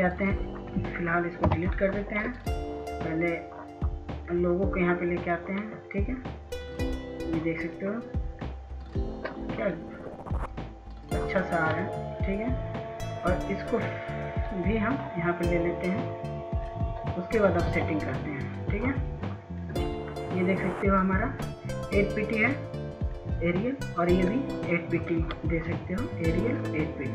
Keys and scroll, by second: 0.8 Delete, 17.2 F2, 18.2 F2, 25.2 ctrl+s, 25.5 ctrl+s, 26.1 ctrl+s, 26.4 ctrl+s.